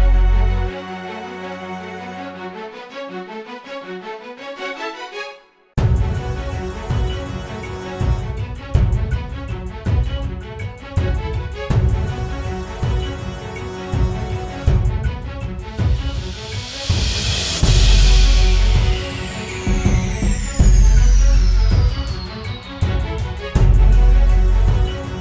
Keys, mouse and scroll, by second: 11.0 right click, 12.5 double click.